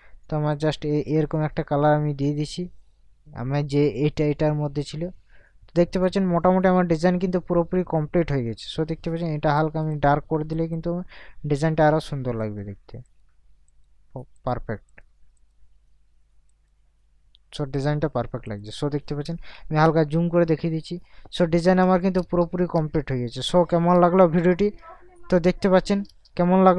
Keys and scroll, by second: 19.7 ctrl+KP_Add, 21.2 ctrl+KP_Subtract, 22.2 KP_Add, 22.7 ctrl+KP_Add, 24.0 ctrl+KP_Subtract, 26.1 ctrl+KP_Add.